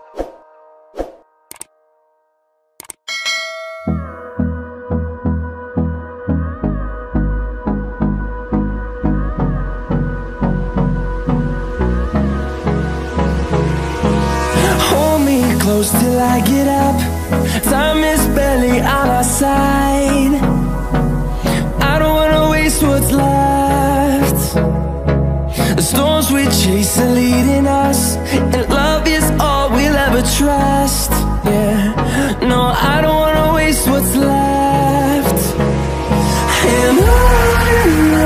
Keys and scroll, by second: 5.8 ctrl+shift+a, 7.1 ctrl+shift+a.